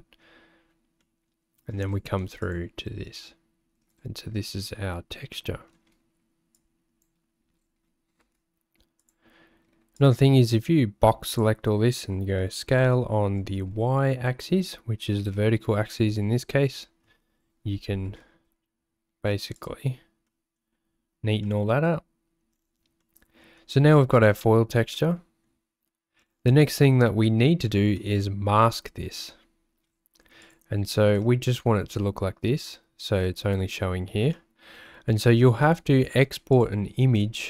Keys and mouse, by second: 1.1 middle click, 5.5 middle click, 6.6 click, 8.2 g, 10.1-11.4 drag, 12.8 s, 18.0 g, 20.3 middle click, 21.5 click, 23.1 click, 25.0 click, 27.3 click, 28.0 click, 34.4 click, 35.8 click.